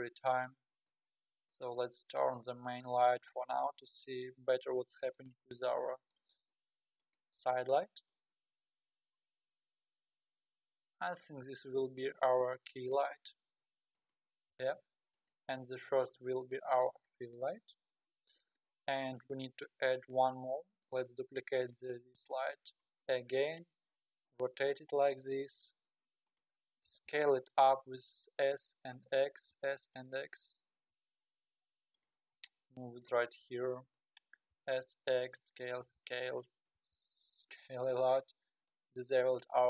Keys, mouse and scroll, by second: 0.4 click, 3.4-3.9 scroll down 3, 3.9 g, 5.5 r, 6.5 g, 7.4 r, 8.3 g, 11.8 r, 13.2 r, 14.5 g, 17.3 click, 21.6 click, 22.7 shift+d, 24.4 r, 26.9 s, 29.3 s, 30.9 r, 32.4 g, 33.4 r, 34.5 s, 35.8 s, 36.8 s, 38.7 click, 39.0 click.